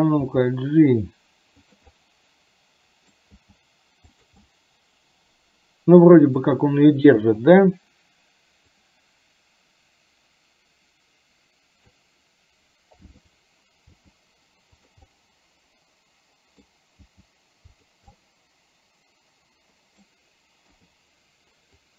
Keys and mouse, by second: 0.3 g, 2.0-3.3 middle drag, 3.4 g, 4.6-6.4 middle drag, 8.8-12.1 drag, 13.2 click, 14.0 g, 15.1-16.7 middle drag, 17.1 g, 18.2-20.2 middle drag, 21.8-21.9 drag.